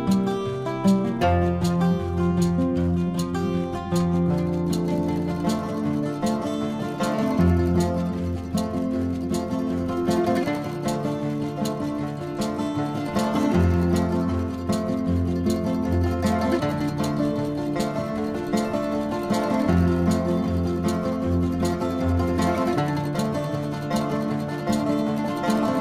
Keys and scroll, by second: 1.8 space, 5.2 space, 9.0 space, 9.9 ctrl+=, 10.2 space, 11.0 ctrl+-, 11.1 space, 11.5 ], 16.2 space, 19.4 space, 20.9 ctrl+alt+z, 21.9 space, 23.0 ctrl+=, 23.7 ctrl+=, 24.2 ctrl+=, 24.6 ctrl+=, 24.9 ctrl+-.